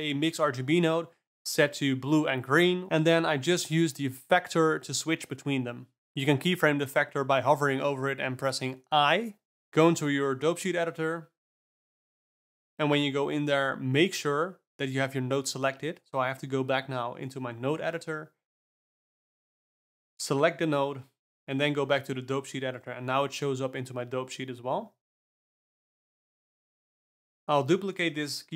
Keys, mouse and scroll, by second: 2.2-5.2 drag, 9.2 shift+F12, 11.2 click, 11.7 click, 13.2 click, 15.4 click, 16.0 click, 16.9 shift+click, 18.8 shift+F3, 19.9 click, 20.8 shift+F12, 22.8 click, 23.3 click, 23.9 click, 24.8 alt+a, 25.2 click, 26.0 g.